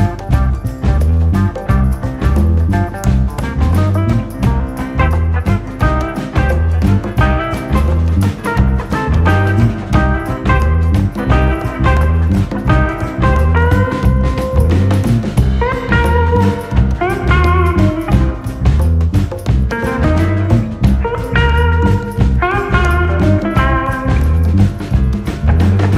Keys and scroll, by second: 14.9 ctrl+v, 17.0-17.6 ctrl+v, 19.8 ctrl+d, 20.4 ctrl+], 20.5 ctrl+[, 22.4 u.